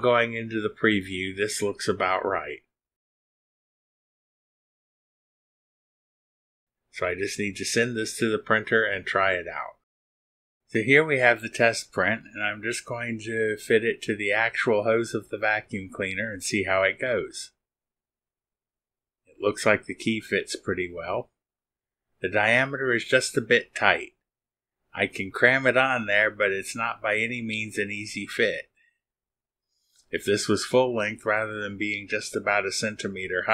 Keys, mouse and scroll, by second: 0.7 scroll up 1, 1.2 middle click, 2.4 middle click, 3.2 click, 4.0 click, 4.3 click, 4.9 scroll up 1, 5.5 middle click.